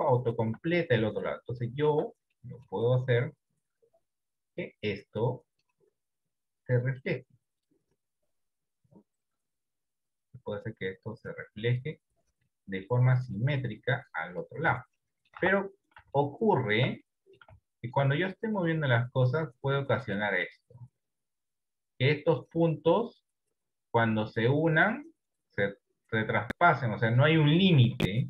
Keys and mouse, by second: 0.0 shift+middle click, 1.1 Tab, 1.7 middle click, 2.5 middle click, 4.7 click, 6.3 click, 7.8 click, 9.7 click, 11.2 click, 12.5 middle click, 14.0 click, 14.8 Tab, 15.1 middle click, 15.4 Tab, 16.2 shift+middle click, 17.2 middle click, 17.8 shift+middle click, 18.4 right click, 19.4 click, 21.4 click, 23.2-27.2 drag, 27.6 ctrl+z.